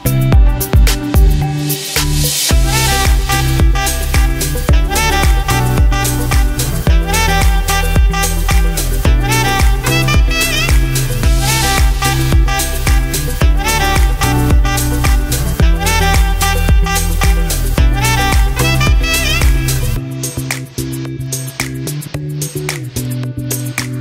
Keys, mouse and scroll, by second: 10.4 scroll up 1, 11.0 scroll down 1, 11.5-17.2 drag, 17.2 Delete, 18.5-24.0 drag.